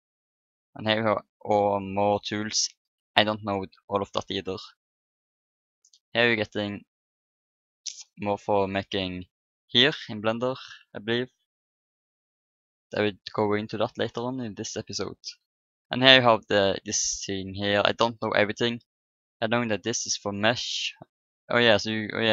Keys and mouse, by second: 4.3-10.1 drag, 10.1-13.6 middle drag, 13.6-15.5 drag, 20.1 middle click, 20.3-21.9 drag.